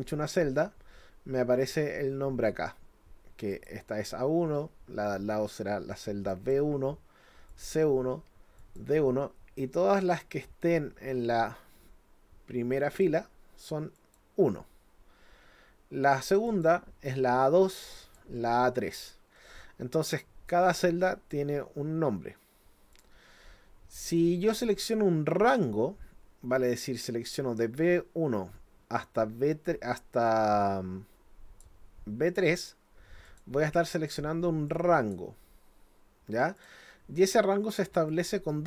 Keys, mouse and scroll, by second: 0.3 click, 3.5 click, 6.3 click, 7.5 click, 8.6 click, 10.2-13.0 drag, 14.0 click, 16.5 click, 18.0 click, 22.9 click, 25.6-31.6 drag, 33.3 click, 34.0 click, 34.7 click, 36.6 click, 38.1 click.